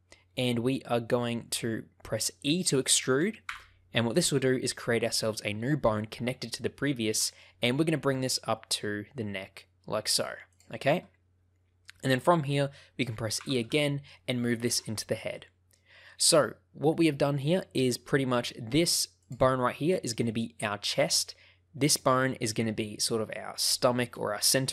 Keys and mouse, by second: 3.4 e, 10.5 ctrl+click, 11.8 shift+middle click, 13.3 e, 14.5 ctrl+click, 15.3 shift+middle click, 19.2 click.